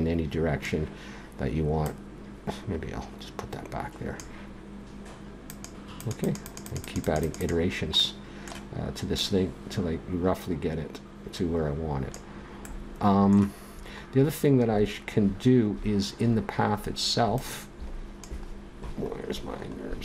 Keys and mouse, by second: 1.8-3.8 drag, 5.5-8.0 drag, 8.0-9.1 middle drag, 9.1-10.9 drag, 15.7-17.0 middle drag, 17.3-19.1 drag, 19.1-20.0 middle drag.